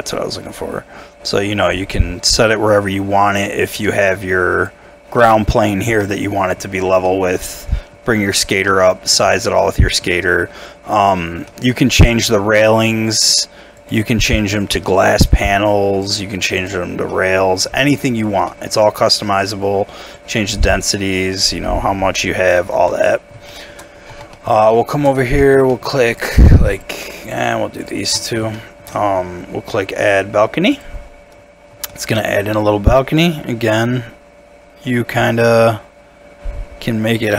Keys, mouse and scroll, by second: 6.1 middle click, 8.7-9.2 scroll down 1, 9.6 middle click, 10.5-10.9 scroll up 1, 11.5 middle click, 17.1 middle click, 17.9 scroll down 1, 18.5 middle click, 19.3-19.6 scroll down 1, 22.7 scroll, 22.7 Tab, 23.0 middle click, 23.5 shift+middle click, 23.9 scroll down 1, 24.0 scroll up 1, 24.1 Tab, 24.3 middle click, 24.7 shift+middle click, 25.1 shift+scroll up 2, 25.4 middle click, 26.3 shift+click, 28.2 shift+middle click, 28.7 shift+middle click, 31.6 scroll up 1, 31.9 shift+middle click.